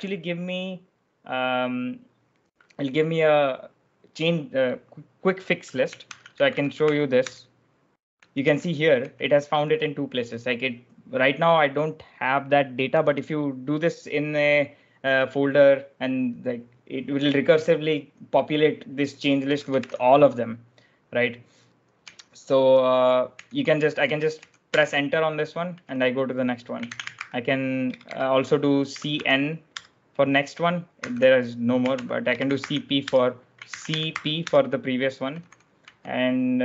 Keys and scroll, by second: 5.7-9.5 typing, 12.7-13.5 typing, 19.1-20.2 typing, 21.9-29.7 typing, 31.0-36.2 typing.